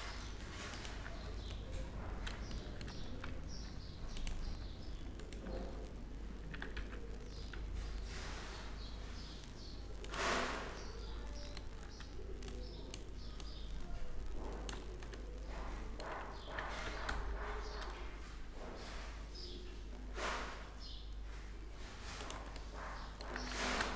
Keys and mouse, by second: 0.5 Tab, 4.0 Tab, 5.7-9.3 right drag, 6.2 e, 10.1-11.3 middle drag, 12.4-14.8 drag, 14.8-16.3 middle drag, 16.3 e, 21.4 click, 22.1 middle click, 23.1 s.